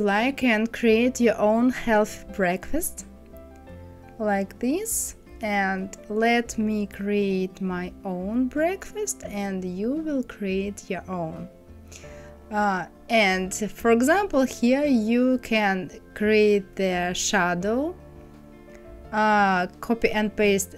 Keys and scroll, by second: 19.7 ctrl+c, 20.3 ctrl+f.